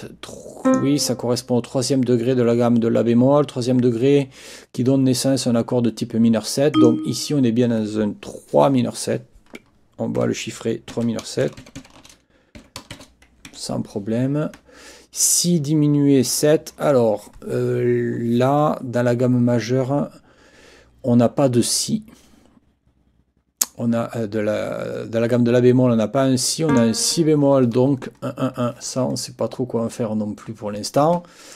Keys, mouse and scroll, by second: 0.7 click, 6.7 click, 10.9 ctrl+t, 11.4 ctrl+shift+i, 12.6 m, 13.5 Escape, 26.7 click, 31.5 click.